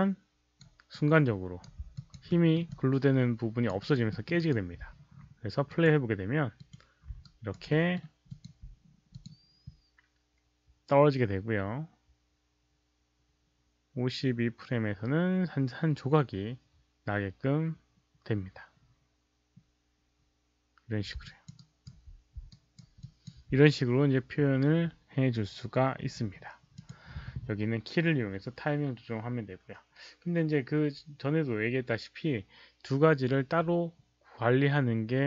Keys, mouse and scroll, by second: 0.8-1.6 right drag, 1.9 alt+click, 2.2 alt+middle click, 2.6 alt+click, 3.7 alt+right click, 4.0 alt+middle click, 4.3 alt+right click, 5.6 alt+click, 6.5 alt+click, 7.3 alt+right click, 7.7 alt+middle click, 8.3 alt+click, 9.1 click, 15.1 alt+right click, 15.6 alt+click, 16.4 alt+click, 16.4 alt+middle click, 16.4 alt+right click, 18.0 alt+click, 18.0 alt+middle click, 21.2 alt+click, 21.5 alt+right click, 22.5 alt+right click, 23.0 alt+click, 26.7 click, 31.6 alt+click, 31.6 alt+right click.